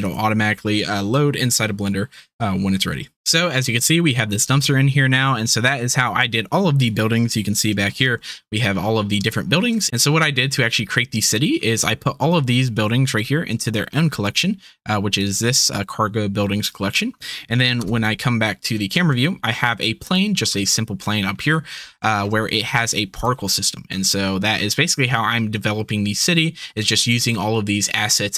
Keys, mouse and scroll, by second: 5.1 drag, 7.6 KP_Decimal, 8.3 click, 8.5 middle click, 9.2 shift+click, 9.4 shift+click, 9.9 ctrl+s, 15.1 drag, 17.8 KP_0, 18.2-19.7 middle drag, 21.4-22.4 middle drag, 23.1 click.